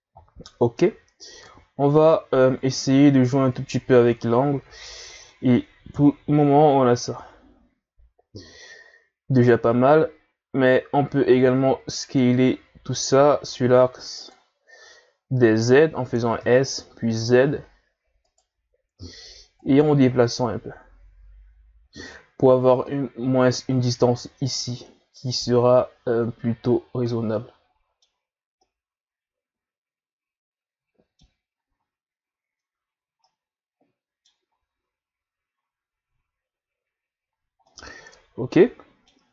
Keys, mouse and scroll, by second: 1.5-4.5 drag, 4.5 a, 4.9-5.9 middle drag, 5.9 KP_1, 9.4 right click, 11.3 s, 16.1 s, 19.5-22.6 drag, 26.8 scroll down 4, 27.1-31.6 middle drag, 33.2-34.5 middle drag, 34.5-36.0 scroll down 1, 36.0-37.3 scroll down 1, 37.3 scroll down 1, 37.6-39.3 middle drag.